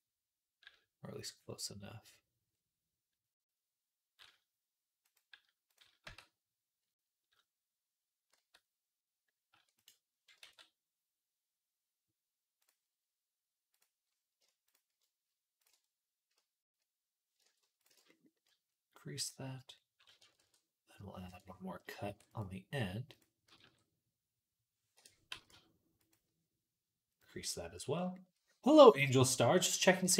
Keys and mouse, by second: 5.0-9.7 right drag, 5.9 Tab, 8.2 a, 9.4 e, 9.7-13.5 middle drag, 10.3 alt+s, 13.5-14.5 drag, 14.5 alt+shift+middle click, 15.4 alt+shift+click, 15.5-17.6 middle drag, 17.6 ctrl+alt+shift+click, 17.8-18.8 middle drag, 18.8-23.0 drag, 20.2 ctrl+r, 21.9 ctrl+r, 23.0-25.1 middle drag, 23.5 g, 25.1 g, 27.1-30.1 drag, 28.1-30.1 right drag, 29.9 g.